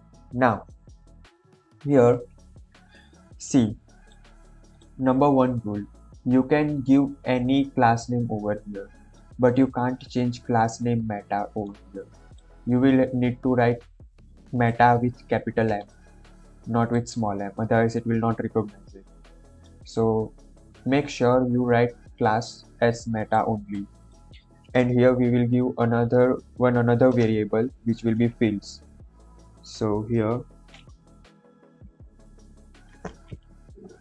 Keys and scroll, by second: 27.2 Return.